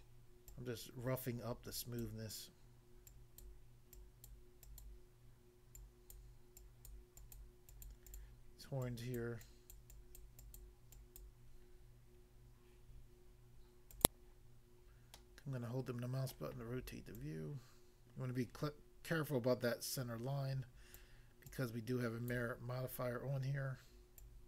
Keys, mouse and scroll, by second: 0.0 click, 0.5 click, 2.0 click, 3.1 click, 3.4 click, 4.0 click, 4.3 click, 5.8 click, 6.2 click, 6.6 click, 7.0 click, 7.7 click, 7.8 click, 8.0 click, 8.2 click, 8.8 double click, 9.3 double click, 9.5 click, 9.8 click, 10.3 click, 10.6 click, 11.2 click, 13.9 click, 14.1 click, 15.2 middle click, 16.4 middle click, 17.2 click, 21.0 click, 21.5 click, 22.3 click, 22.9 scroll down 1, 24.2 click.